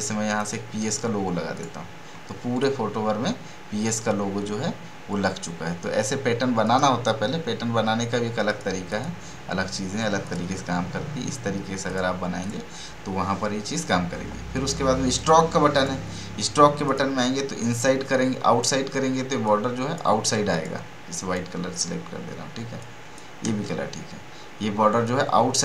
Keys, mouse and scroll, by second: 15.1-19.4 drag, 19.7-25.6 drag.